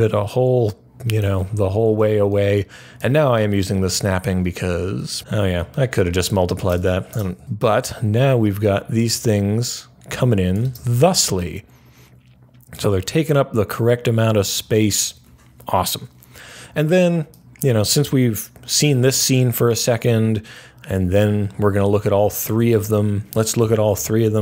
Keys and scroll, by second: 23.5 Page_Down, 23.8 Page_Down.